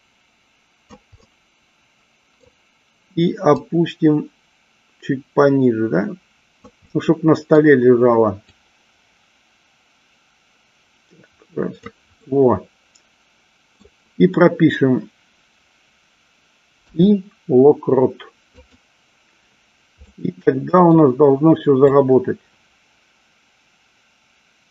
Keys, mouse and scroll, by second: 1.4-2.6 middle drag, 3.7-6.9 drag, 7.1 scroll up 1, 7.3 middle click, 8.7-12.0 drag, 12.5-14.1 middle drag, 20.3 middle click, 22.1-24.7 drag.